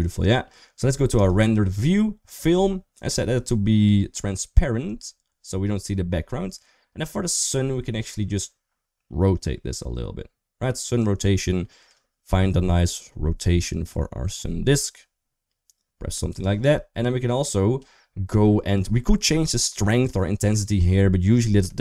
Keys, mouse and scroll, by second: 2.1 click, 4.6 click, 5.5 middle click, 10.9-16.3 drag.